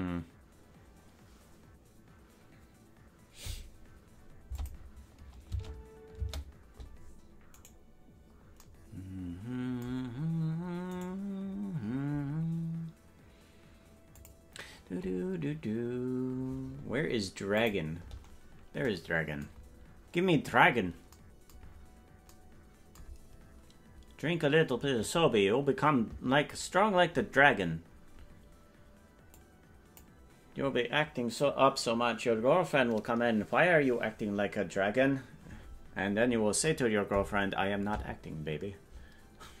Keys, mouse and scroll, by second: 4.6 click, 6.3 space, 7.6 right click, 11.0 right click, 14.2 click, 17.5 click, 19.6-21.1 scroll down 10, 21.6 scroll down 2, 23.2-23.5 scroll up 5, 29.4 click.